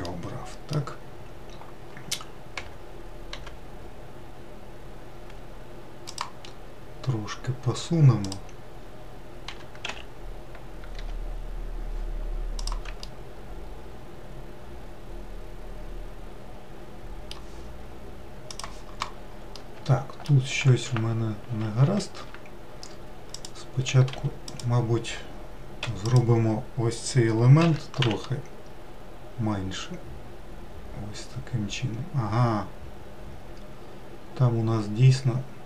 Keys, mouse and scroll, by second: 2.4 g, 8.0-9.3 drag, 9.3 g, 12.8-16.0 middle drag, 19.4-20.8 middle drag, 20.8 ctrl+z, 21.3 ctrl+z, 21.7 ctrl+z, 23.2 click, 23.9 4, 24.4 click, 25.7 3, 25.9 click, 27.5 s.